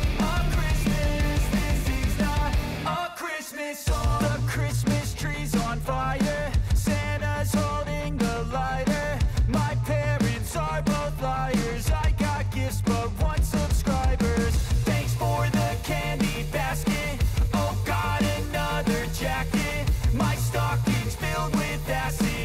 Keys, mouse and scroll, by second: 2.3 space, 4.7 space, 6.1-8.9 drag, 8.9-9.6 typing, 10.9-11.5 typing, 12.6-13.3 typing, 14.1 click, 15.6 space, 17.7-20.8 drag, 20.8 j, 22.1 click.